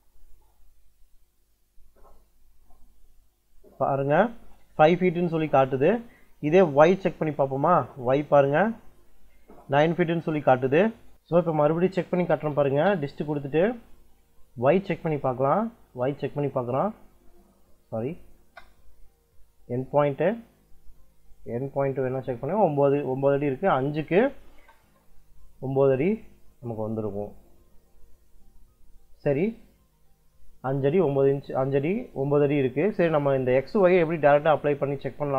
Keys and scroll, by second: 6.3 space, 11.9 d, 12.2 i, 12.5 space, 17.7 Escape, 18.2 space, 24.4 space.